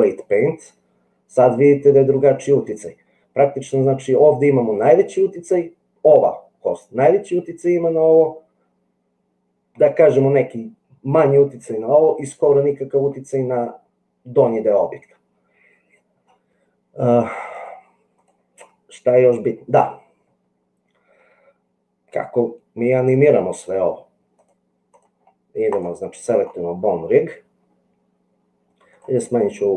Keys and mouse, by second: 17.7 click, 24.5 click.